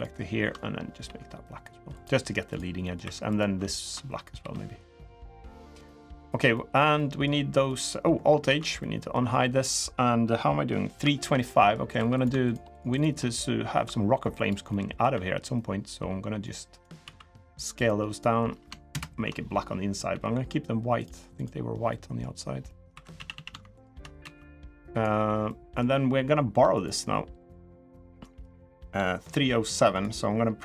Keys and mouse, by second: 0.8 g, 2.6 middle click, 2.8 3, 3.1 click, 3.5 ctrl+shift+click, 4.1 g, 5.9 g, 6.3 middle click, 6.7 middle click, 7.4 middle click, 8.2 alt+h, 8.5 middle click, 10.8 shift+middle click, 11.3 middle click, 11.7 3, 11.9 shift+click, 12.5 shift+click, 13.5 i, 14.4 middle click, 14.9 e, 16.8 s, 18.7 ctrl+KP_Add, 21.2 click, 21.2 g, 21.6 middle click, 22.4 middle click, 22.7 2, 23.1 a, 23.5 alt+shift+click, 23.9 s, 25.2 middle click, 26.5 click, 27.8 middle click, 29.7 click, 30.3 l.